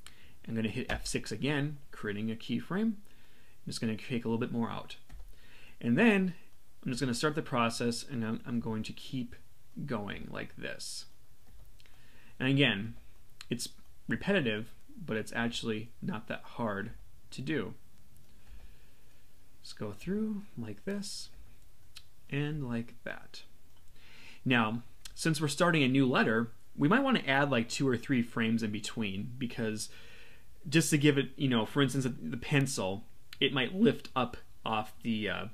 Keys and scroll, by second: 0.9 F6.